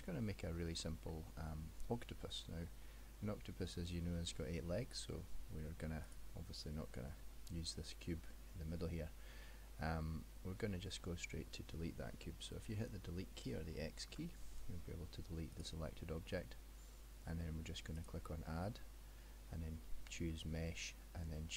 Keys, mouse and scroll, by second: 0.2 scroll up 2, 1.1 middle click, 1.1-2.1 scroll up 1, 6.1 click, 7.3 middle click, 14.2 x, 18.0 click.